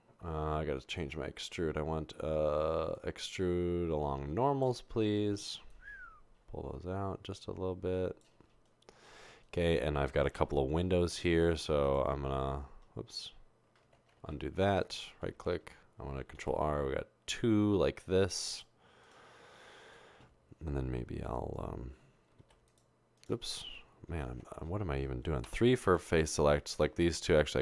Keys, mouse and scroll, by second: 11.2 ctrl+r, 14.3 ctrl+z, 14.8 ctrl+z, 16.4 ctrl+z, 16.5 ctrl+r, 24.3 ctrl+z, 24.3 e, 25.9 3.